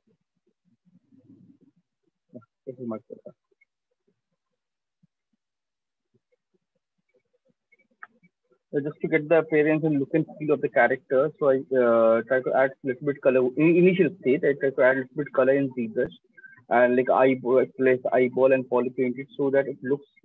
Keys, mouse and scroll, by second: 0.0 click, 1.1 click, 2.8 alt+click, 3.4 right click, 3.8 ctrl+click, 4.7 alt+click, 6.6 shift+click, 7.4 click, 7.9 alt+click, 8.3 click, 8.6 right click, 13.1 click, 13.2 right click.